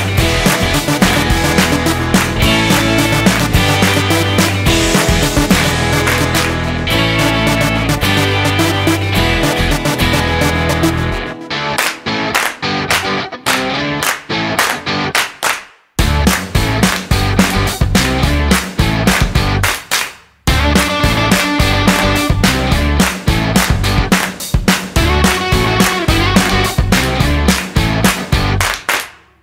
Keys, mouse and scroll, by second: 3.3 click, 4.5 click, 7.1 click, 10.9 g, 15.9 r, 19.8 g, 27.0 shift+a.